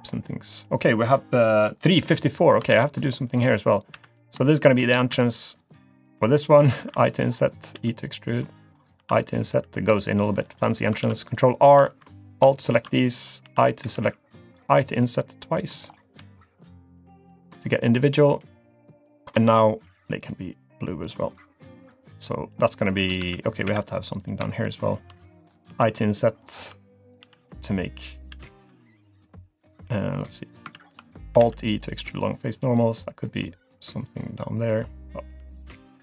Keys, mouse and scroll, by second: 0.0-0.5 scroll down 1, 0.5 middle click, 2.0-2.6 scroll up 1, 2.7 ctrl+r, 3.9 3, 4.1 click, 4.5 shift+click, 5.1 e, 6.9 i, 7.7 e, 9.0 i, 9.6 e, 10.6-10.9 scroll down 2, 11.0 ctrl+r, 11.8 3, 12.1 alt+click, 12.6 alt+shift+click, 13.4 i, 15.9-16.2 scroll up 4, 16.3 shift+middle click, 16.8-17.1 scroll down 1, 17.1 middle click, 19.3 g, 21.6 click, 22.3 middle click, 23.2 ctrl+r, 24.2 click, 24.5 shift+click, 25.7 i, 28.3 e, 30.8 ctrl+z, 31.4 alt+e, 35.4 g.